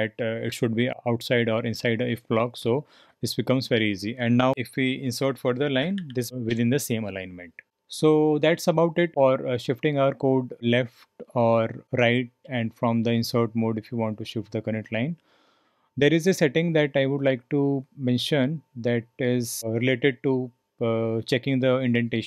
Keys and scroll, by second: 4.5 typing, 5.8-6.9 typing.